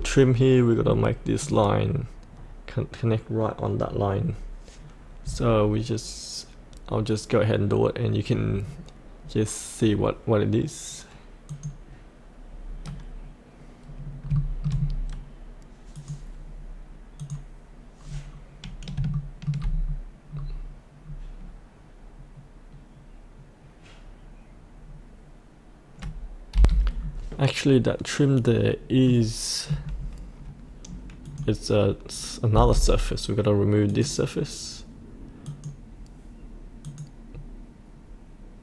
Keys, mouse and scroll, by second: 0.7-1.4 scroll down 1, 1.4 click, 14.0 scroll up 1, 14.3 shift+middle click, 14.7-15.9 scroll down 1, 15.9 click, 18.0-18.9 scroll down 1, 19.1 shift+middle click, 19.7-20.3 scroll down 1, 20.3-26.5 scroll up 1, 26.5 F8, 27.0-28.1 scroll up 1, 29.0 middle click, 31.2 click, 32.5 Delete, 33.8 click.